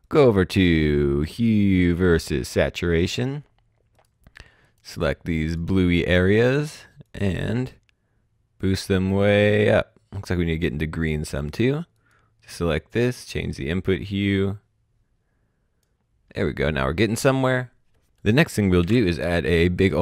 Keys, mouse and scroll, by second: 1.7 click, 3.9 click, 6.2 right click, 7.0 click, 18.1 click, 18.7 s.